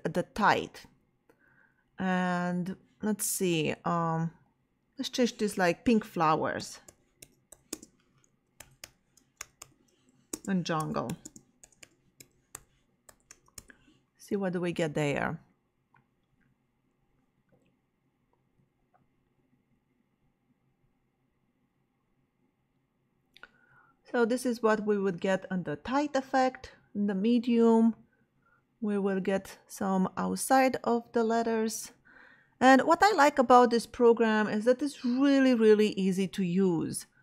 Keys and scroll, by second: 6.3-13.8 typing.